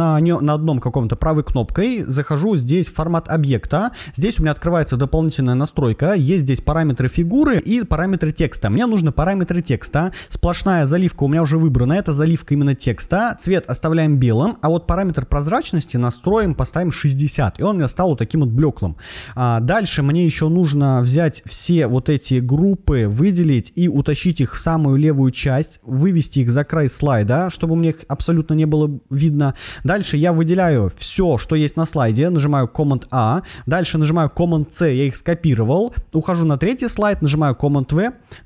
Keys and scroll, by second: 30.5 super+a, 34.4 super+c, 37.0 super+v.